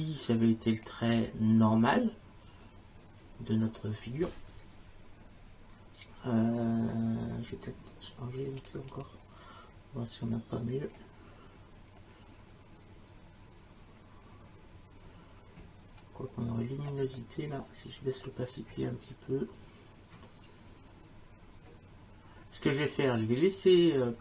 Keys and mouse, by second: 0.9 space, 8.6 click, 18.2 click.